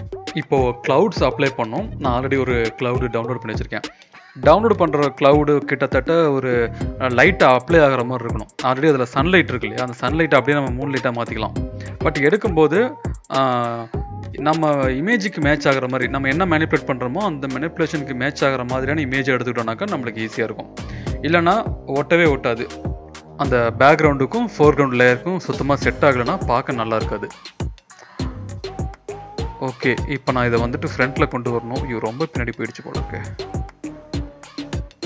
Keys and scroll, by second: 1.1 ctrl+t, 1.6 ctrl+-, 1.8 ctrl+-, 4.7-5.5 typing, 8.3 e, 9.6 e, 10.7 ], 10.8 ], 11.4 ], 13.8 0, 30.4 ctrl+shift+[, 31.0 ctrl+], 31.4 ctrl+], 31.8 ctrl+], 32.5 ctrl+], 33.3 ctrl+-, 33.7 ctrl+], 34.2 ctrl+].